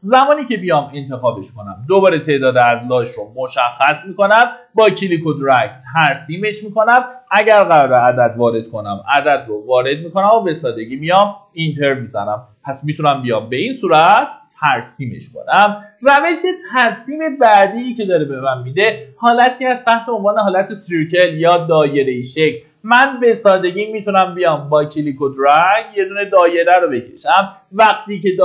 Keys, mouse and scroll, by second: 7.6 KP_1, 7.9 KP_Decimal, 8.1 KP_5, 10.4 scroll down 1, 12.0 scroll up 1, 20.0 click, 22.6 scroll up 1, 23.6-28.4 drag.